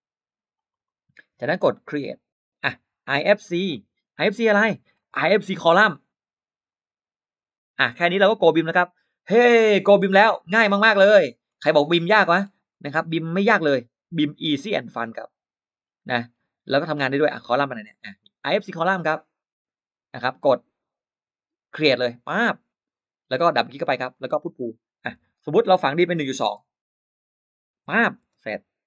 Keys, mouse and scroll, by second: 0.4 click, 0.5 click, 0.7 click, 2.5 click, 4.7 click, 6.5 click, 10.1 middle click, 10.4-10.7 scroll down 2, 11.3-11.6 scroll up 2, 12.2-13.2 scroll down 6, 14.1-14.4 scroll down 2, 15.6-16.4 scroll up 4, 16.9 middle click, 18.3 click, 22.2 click, 23.8 click, 24.0 click, 24.9 p, 25.2 click, 26.7-28.2 typing, 28.8 middle click.